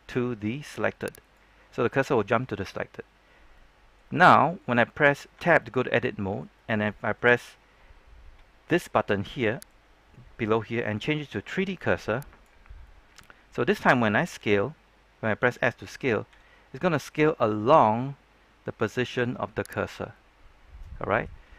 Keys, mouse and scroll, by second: 1.1 click, 3.1-3.5 scroll down 1, 3.5 middle click, 4.1 scroll up 1, 4.3 middle click, 5.3 Tab, 5.5 middle click, 9.6-12.8 drag, 12.8-14.3 middle drag, 16.2 s, 19.7 click, 20.1-21.4 middle drag.